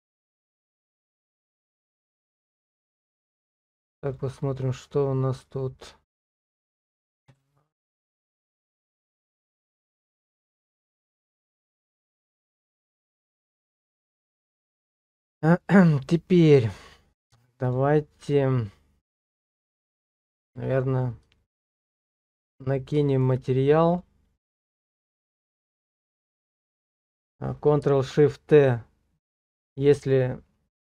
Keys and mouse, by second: 0.1 middle click, 1.9 shift+middle click, 5.5-7.4 drag, 9.9 click, 10.9 shift+click, 11.2-14.0 drag, 14.2 shift+click, 15.1 shift+click, 19.9 shift+middle click, 21.4 shift+middle click, 22.1 shift+middle click, 22.8 middle click, 24.6 middle click.